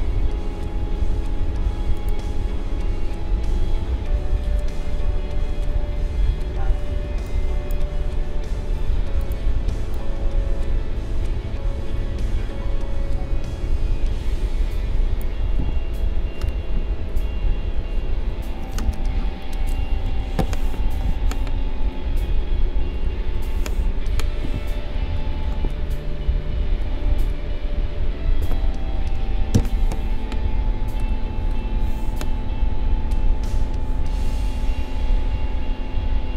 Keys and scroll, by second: 15.6 ctrl+z, 20.0 n, 29.5 n.